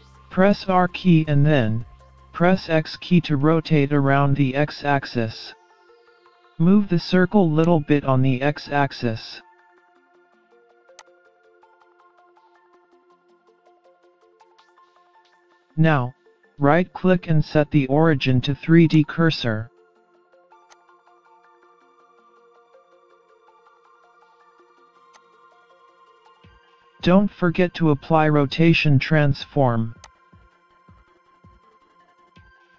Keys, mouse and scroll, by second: 0.7 r, 6.0-6.4 scroll down 2, 6.4-7.2 scroll up 3, 7.6 click, 9.6-10.4 scroll down 5, 11.1 click, 12.7-13.3 scroll up 4, 13.1 middle click, 15.3 right click, 19.8 scroll up 2, 20.7 click, 21.6 ctrl+z, 23.5-24.1 scroll down 2, 24.1 scroll down 1, 25.1 click, 28.1 middle click, 30.1 click.